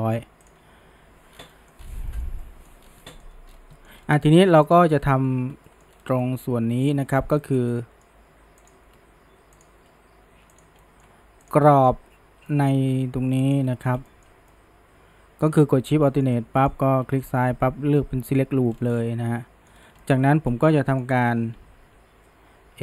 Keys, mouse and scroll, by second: 1.3 scroll down 1, 1.5-1.8 middle drag, 1.8 scroll up 2, 2.1-2.8 shift+middle drag, 2.8 scroll down 1, 3.0-3.5 middle drag, 3.5-4.7 scroll up 2, 3.8 middle drag, 4.7 click, 5.3 Tab, 5.7 shift+middle drag, 5.9 scroll up 2, 6.2-7.2 middle drag, 7.2 scroll up 1, 7.4-8.7 shift+middle drag, 8.7 click, 9.6 alt+shift+click, 10.6 click, 10.8-11.5 middle drag, 11.5 click, 11.7-13.5 middle drag, 13.5 alt+shift+click, 13.8 scroll down 2, 14.1-15.6 shift+middle drag, 15.6-16.1 scroll up 1, 16.1-18.7 shift+middle drag, 18.7 scroll down 1, 19.0-19.8 middle drag, 19.8 scroll up 1, 20.0-20.5 shift+middle drag, 20.5 scroll down 1, 20.7-21.4 middle drag, 21.4 KP_1, 21.8 KP_3.